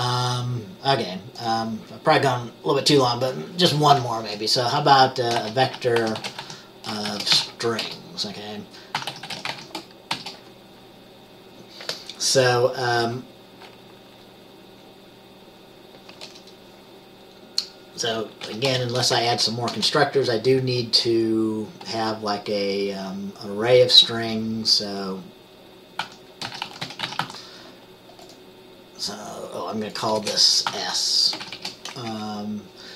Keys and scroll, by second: 4.3 Return, 5.5-8.0 typing, 9.1-10.2 typing, 18.6 ;, 18.8 Return, 19.3 Up, 19.4 Up, 19.8 Return, 26.2-27.3 typing, 30.3-31.7 typing, 32.2 Up.